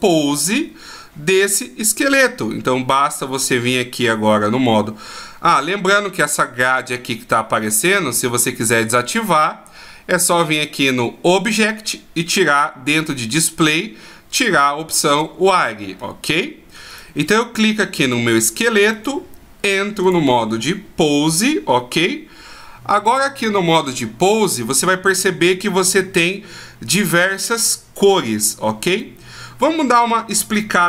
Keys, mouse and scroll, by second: 1.3 right click, 2.0 right click, 5.5 right click, 10.7 click, 13.7 click, 16.0-16.3 scroll up 1, 16.3-16.9 scroll down 1, 16.9 right click, 18.9 click, 25.6-28.7 scroll down 1, 28.9 right click.